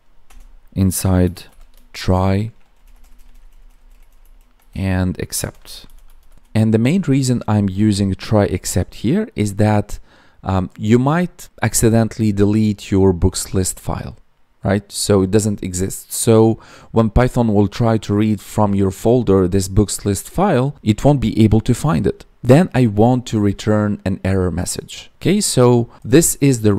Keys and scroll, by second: 2.7 Down, 6.3 Down.